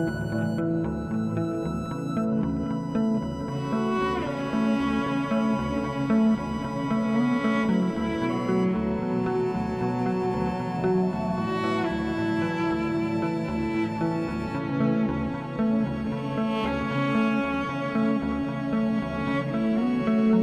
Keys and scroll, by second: 6.9 ctrl+t, 18.5 ctrl+=, 19.6 ctrl+=.